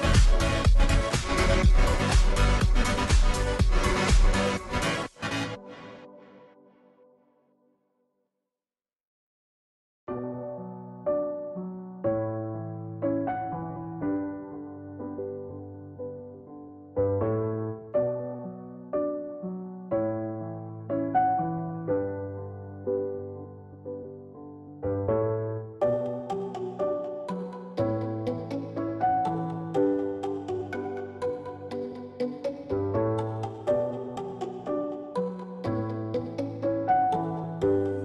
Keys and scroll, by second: 10.2 ctrl+d, 34.4-36.2 typing.